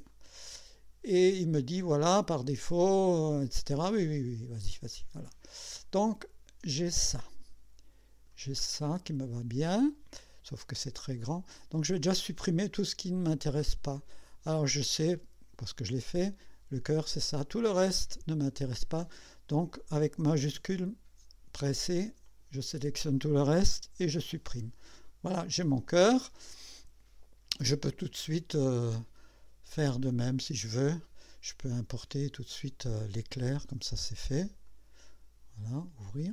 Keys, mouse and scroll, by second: 0.1 click, 4.0 click, 5.3 scroll down 2, 6.0-8.5 drag, 8.6-8.9 scroll up 1, 10.0 scroll up 1, 10.6-11.7 drag, 13.2-14.1 scroll down 1, 16.0 click, 17.9 click, 18.9 scroll up 1, 22.3 shift+click, 23.9 Delete, 30.2 click, 33.0 click, 34.7 click, 36.2 click.